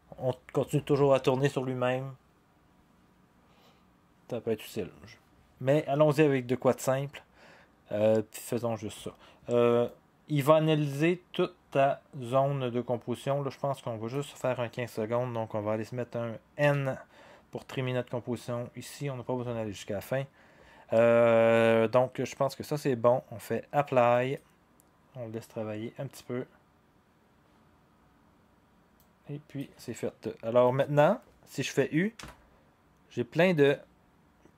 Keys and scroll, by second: 16.6 n, 32.2 u.